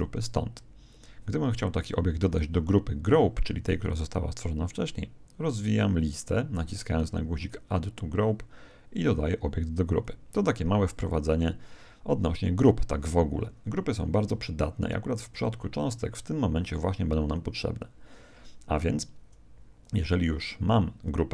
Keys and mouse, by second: 7.3 click.